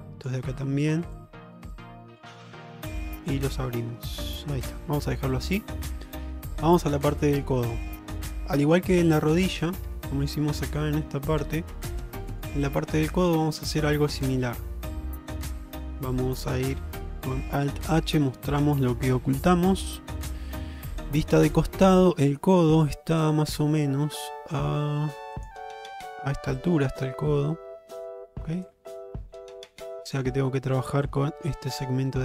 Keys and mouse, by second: 1.2 click, 1.4 click, 3.0 Tab, 3.6 alt+z, 4.7 shift+middle drag, 5.5-6.6 middle drag, 7.1 shift+middle drag, 7.5 middle drag, 8.2-8.6 middle drag, 8.8 shift+middle click, 9.5 click, 9.9 Tab, 10.3 alt+middle click, 11.1 shift+middle click, 12.1 middle click, 13.2 shift+middle click, 13.5-15.4 middle drag, 15.6 shift+middle click, 16.1 middle click, 17.9 alt+h, 18.7-21.1 middle drag, 21.3 shift+middle click.